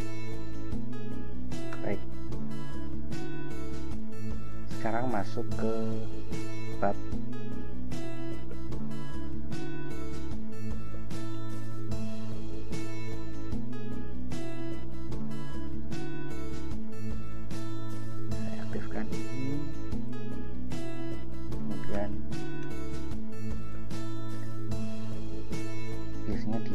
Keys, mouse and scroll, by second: 1.9 ctrl+Return, 3.0 ctrl+i, 4.0 ctrl+b, 8.6 ctrl+e, 9.6-11.1 typing, 11.5 shift+Return, 13.0-16.1 typing, 20.0 click, 22.1 Return, 22.8 Return, 23.8 ctrl+j.